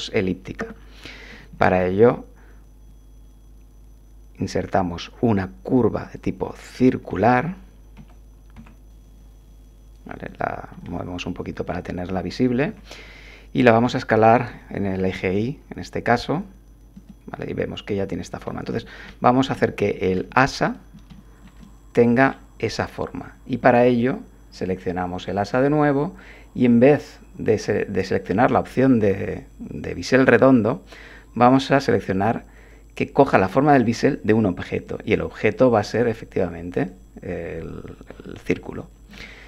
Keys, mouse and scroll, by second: 1.8 shift+a, 6.0 click, 7.1 middle click, 8.0 g, 8.5 x, 10.3 click, 10.8-11.8 drag, 12.6 7, 13.8 s, 14.5 y, 16.9 click, 18.5-19.2 drag, 19.5 click, 20.6 click, 21.1-22.5 shift+drag, 31.4 click, 34.8 click, 36.8 click, 38.2 middle click, 39.1 click.